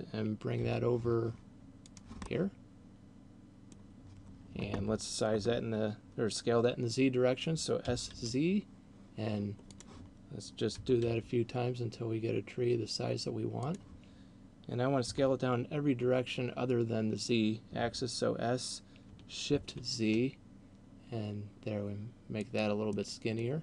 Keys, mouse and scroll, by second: 0.6 g, 1.9 click, 2.1 middle click, 7.9 s, 9.9 click, 10.9 s, 13.9 click, 14.9 s, 22.6 click, 22.9 middle click.